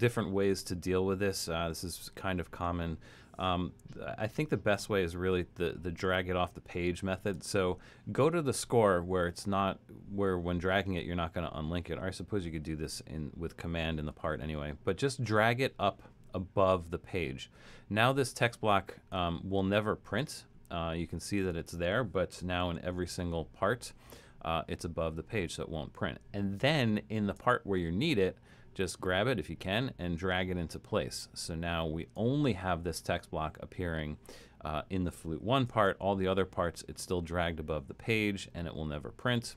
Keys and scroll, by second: 0.0 alt+super+,, 22.6 alt+super+., 24.0 alt+super+., 26.6 alt+super+,, 35.9 alt+super+., 36.8 alt+super+., 37.2 alt+super+., 37.8 alt+super+., 38.3 alt+super+., 38.8 alt+super+,, 39.3 alt+super+,.